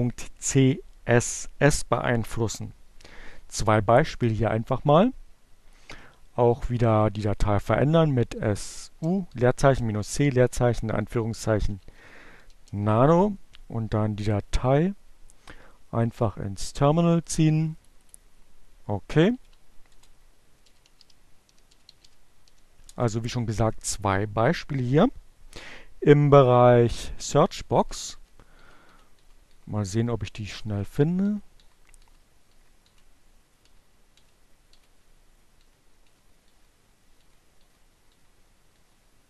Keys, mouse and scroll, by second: 0.1 click, 0.6-1.5 typing, 3.1-4.3 typing, 8.3-9.1 typing, 10.6-11.5 typing, 13.0 click, 15.1 click, 16.0-17.4 drag, 18.7-21.8 typing, 18.8 shift+Return, 24.0 Page_Down, 36.6 Page_Down, 37.9 Page_Down.